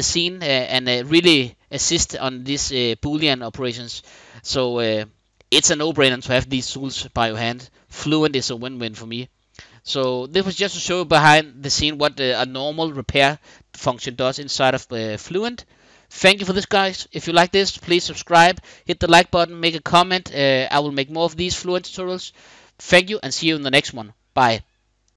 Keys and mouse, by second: 4.7-7.9 middle drag.